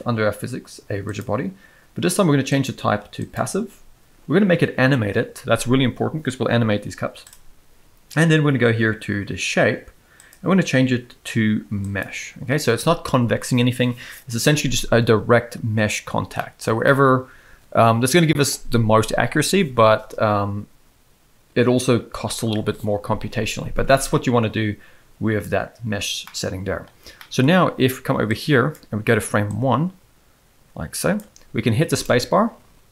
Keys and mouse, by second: 1.1 click, 2.7-3.3 drag, 7.3 click, 10.3-12.0 drag, 16.4 middle click, 16.8-18.1 shift+middle drag, 26.2-26.8 middle drag, 27.1 middle click, 28.3 click, 29.4 click, 32.0 space.